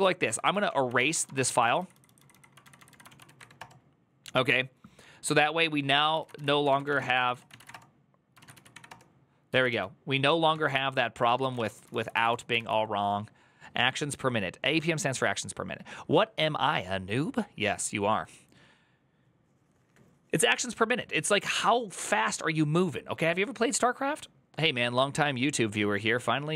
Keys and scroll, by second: 0.8 ctrl+Right, 0.8 ctrl+w, 0.8 BackSpace, 0.9 BackSpace, 1.0 BackSpace, 1.3 ctrl+Left, 1.4 ctrl+Left, 1.7 ctrl+Left, 2.4 ctrl+Left, 2.4 Right, 2.6 Right, 2.7 Right, 2.8-3.7 typing, 5.9-8.3 typing, 8.2 ctrl+a, 8.5 Up, 8.6 Return, 9.3 ctrl+a, 9.5 1, 10.3 ctrl+t, 10.9-12.9 typing.